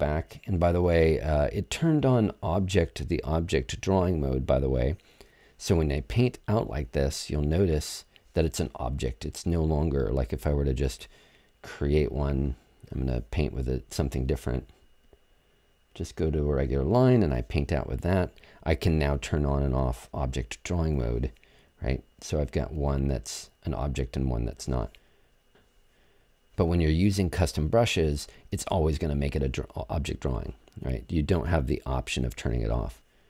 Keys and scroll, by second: 0.0 BackSpace, 26.1 BackSpace.